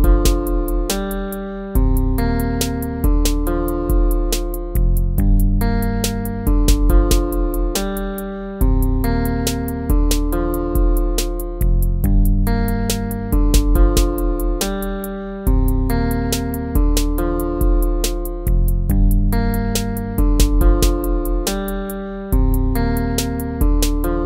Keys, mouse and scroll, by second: 0.4 ctrl+-, 2.1 ctrl++.